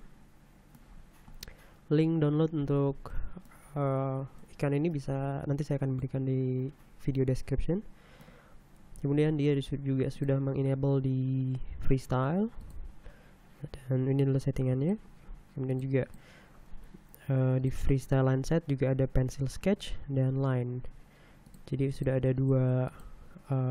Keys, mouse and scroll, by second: 1.0-1.4 scroll down 2, 2.6 middle click, 8.9 scroll down 1, 13.0 scroll down 1, 13.0 middle click, 14.8 click, 15.7 click, 16.0 click, 17.6 click, 21.4 click, 21.9 click, 22.4 click, 22.8 click.